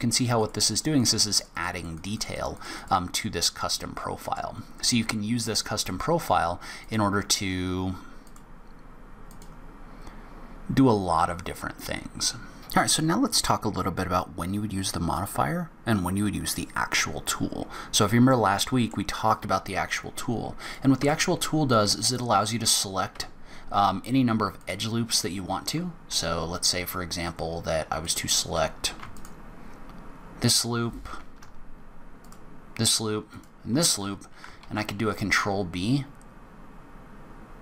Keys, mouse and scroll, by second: 0.1 click, 0.4 click, 0.6 click, 0.9 click, 1.1 click, 1.3 click, 1.5 click, 1.7 click, 1.9 click, 2.1 click, 2.3 click, 2.5 click, 2.7 click, 3.6 middle click, 5.7 click, 8.2 click, 12.6 click, 17.6 scroll up 1, 18.1 scroll down 1, 18.5 middle click, 20.8 click, 21.2 Tab, 23.3 2, 24.8 alt+click, 27.2-27.6 scroll up 2, 28.2 click, 29.3 alt+click, 32.4 alt+shift+click, 33.5 alt+shift+click, 34.8 ctrl+b.